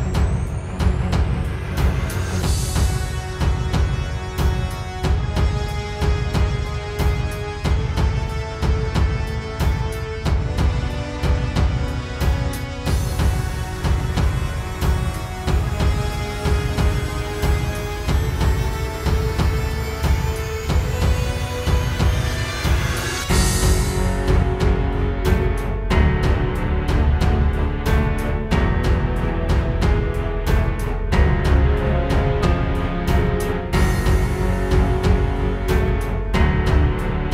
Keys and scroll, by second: 8.1 space, 8.7 super+space, 9.2 super+space, 15.1 space, 15.6 space, 18.9 space, 19.5 space, 27.6 space, 32.0 space, 35.7 space.